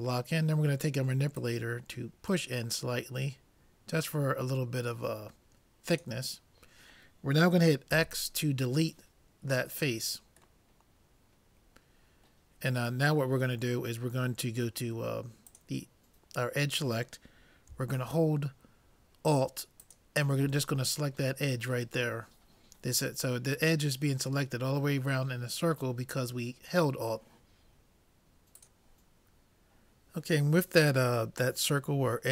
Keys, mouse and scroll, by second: 1.4-3.1 drag, 7.9 x, 10.7-12.5 middle drag, 12.8-14.9 middle drag, 15.5-17.3 drag, 19.9-21.6 drag.